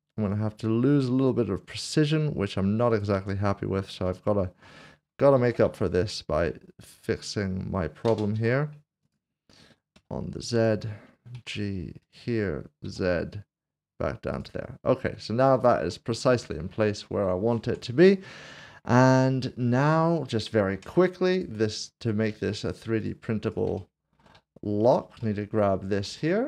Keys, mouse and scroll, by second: 2.9 click, 3.6 scroll up 1, 4.1 shift+middle click, 5.4 alt+c, 5.6 typing, 8.3 v, 9.1 click, 10.5 z, 11.3 g, 12.2 click, 12.8 z, 14.3 click, 14.8 scroll down 1, 15.8 Tab, 16.4 middle click, 16.9 scroll down 1, 17.7 Tab, 18.0 click, 18.5 middle click, 19.1 shift+middle click, 20.3 click, 20.7 Tab, 21.3 click, 23.0 shift+click, 23.7 shift+click, 24.8 shift+click, 25.4 shift+click, 26.3 shift+middle click.